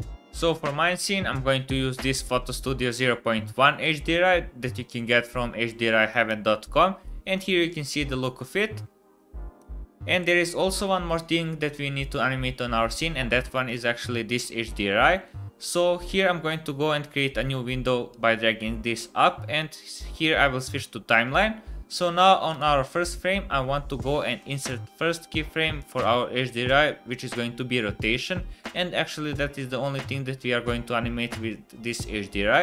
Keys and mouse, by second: 5.7 middle click, 6.6 middle click, 7.3-8.5 middle drag, 8.7 middle click, 9.7 middle click, 10.1 KP_0, 10.3 middle click, 10.5-13.2 middle drag, 14.4-15.0 middle drag, 15.4 middle click, 17.3 click, 19.3-20.8 drag, 22.5 click, 24.1 middle click.